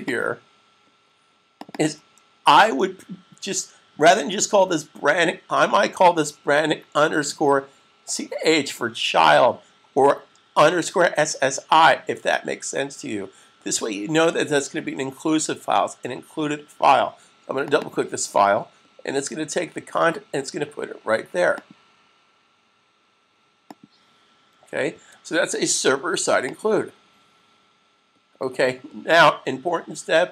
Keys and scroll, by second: 24.9 super+s.